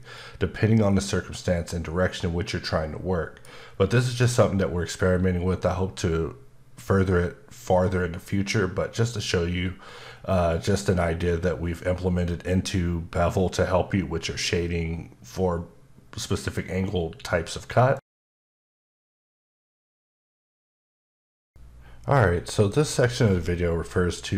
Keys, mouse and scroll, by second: 0.1 middle click.